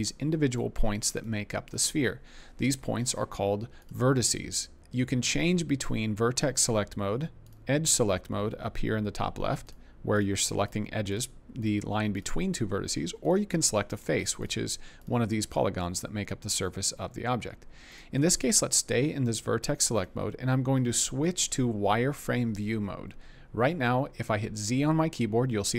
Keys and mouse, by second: 0.5 click, 1.1 click, 4.3 click, 5.8 click, 7.4 click, 9.6 click, 10.6 click, 12.1 click, 17.9 click, 19.9 click, 24.7 z.